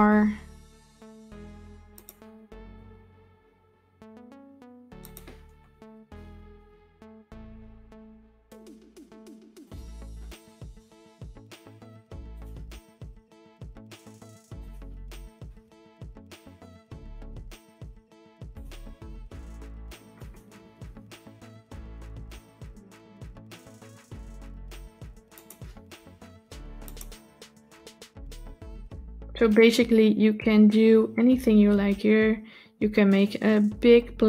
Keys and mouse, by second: 5.8 shift+d, 10.4 shift+d, 12.6 s, 15.2 shift+d, 18.8 s, 20.5 shift+d, 25.8 s, 27.3 shift+d.